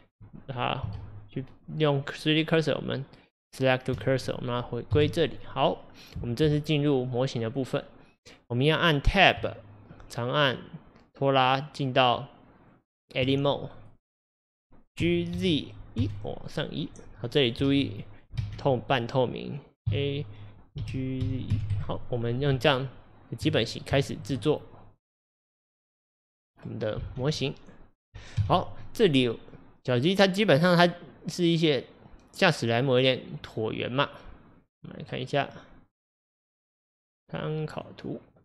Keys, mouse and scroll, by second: 1.0 shift+s, 4.5 click, 4.9 KP_1, 9.4-10.4 Tab, 10.6 Tab, 13.9 click, 15.1 g, 17.7 ctrl+z, 18.4 alt+z, 19.9 a, 20.9 g, 22.6 Tab, 24.0-27.0 shift+middle drag, 27.0 alt+z, 27.4-28.4 middle drag, 28.4 KP_1.